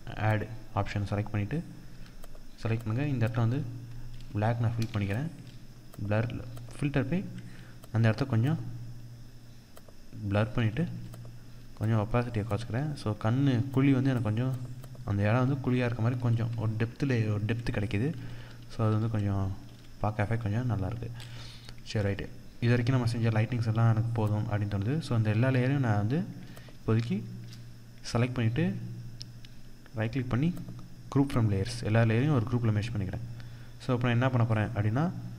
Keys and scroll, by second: 4.3 ctrl+d, 10.3 ctrl+0, 17.5 ctrl+=, 19.1 ctrl+0.